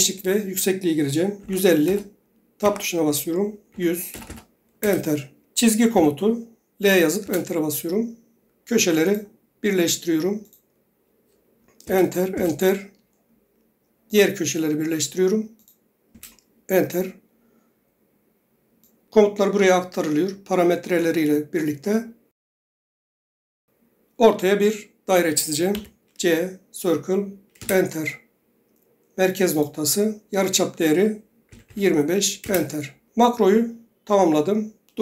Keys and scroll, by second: 1.3-2.0 typing, 2.7 Tab, 3.9-4.4 typing, 4.9 Return, 6.1 l, 7.4 Return, 11.8-12.6 typing, 25.9 c, 27.7 Return, 31.4-32.3 typing, 32.6 Return.